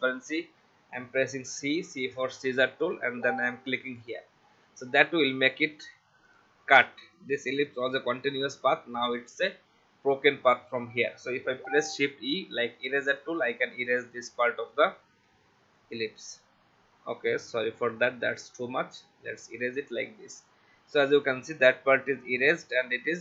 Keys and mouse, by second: 1.5 c, 4.0 click, 4.6 v, 6.3 click, 12.0 shift+e, 13.2 alt+click, 17.6 ctrl+z, 18.7 alt+click, 20.8 v, 21.1 click.